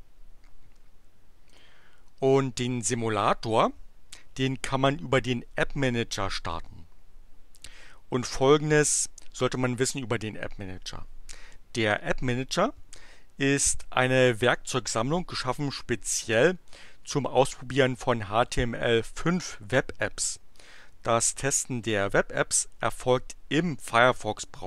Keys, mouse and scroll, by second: 1.4 click, 15.6 ctrl+s.